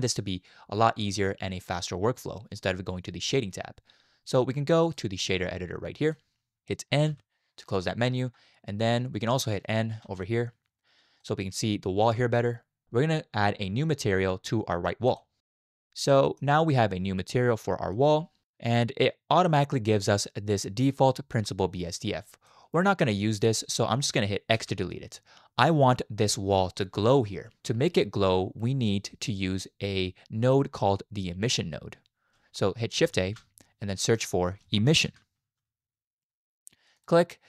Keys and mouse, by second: 4.9-6.1 drag, 7.1 n, 10.0 n, 11.2 shift+click, 15.1 click, 16.3 middle click, 17.3 middle click, 18.8-21.1 drag, 21.4-22.5 drag, 23.3 click, 24.6 x, 33.2 shift+a.